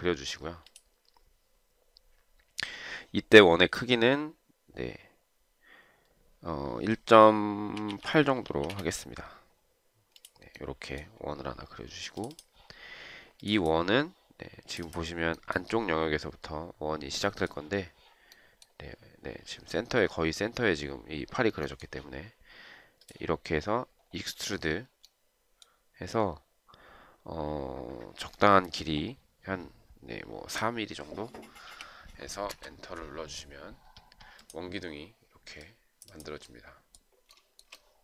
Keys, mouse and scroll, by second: 7.8-9.1 typing, 32.0 4, 32.6 Return.